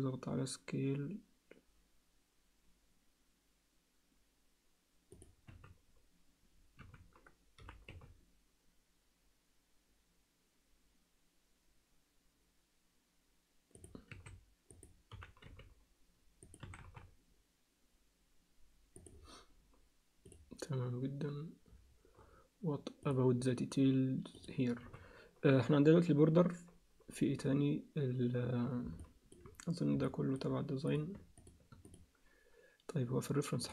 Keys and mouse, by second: 5.5 z, 6.8 z, 7.6 g, 14.1 s, 15.1 g, 16.6 s, 20.2 click, 23.0 click, 24.3 click, 24.8 z, 29.0 alt+middle click, 30.0 alt+middle click, 31.9 click, 33.6 click.